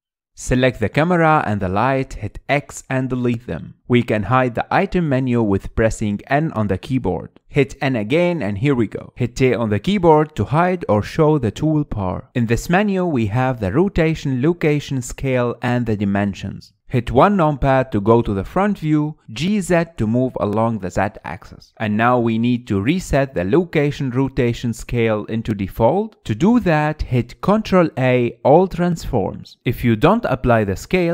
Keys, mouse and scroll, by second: 0.0-0.5 middle drag, 0.5 click, 2.8 x, 5.0-7.4 middle drag, 7.4 n, 7.8 n, 8.3 n, 8.7 n, 10.0 t, 10.3 t, 10.7 t, 11.1 t, 18.4 KP_1, 19.2-19.7 scroll up 6, 19.8-21.0 shift+middle drag, 21.0 click, 21.4 g, 25.5-25.9 scroll down 3, 25.9-27.7 shift+middle drag, 28.3 ctrl+a.